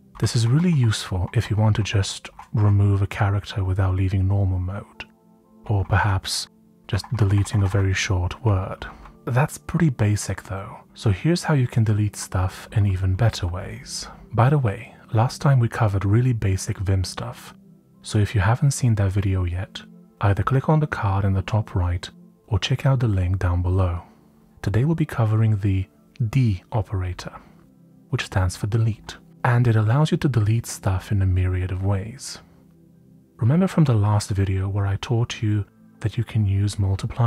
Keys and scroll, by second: 0.2 Right, 0.4-2.3 typing, 3.7 typing, 5.5 Tab, 5.8-7.1 typing, 8.4-9.1 typing, 14.2 Up, 28.3 j, 28.9 j, 30.5 typing.